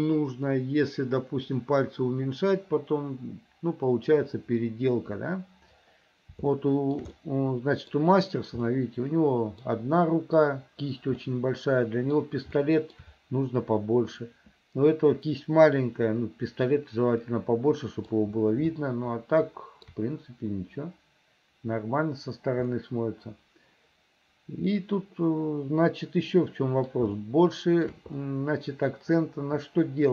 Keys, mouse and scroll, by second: 6.6 shift+middle click, 7.2 middle click, 8.8 middle click, 11.3 middle click, 12.6 shift+middle click, 17.4 middle click, 18.8-20.0 shift+middle drag, 22.8-27.0 middle drag, 27.2 shift+middle click, 28.3-30.1 middle drag.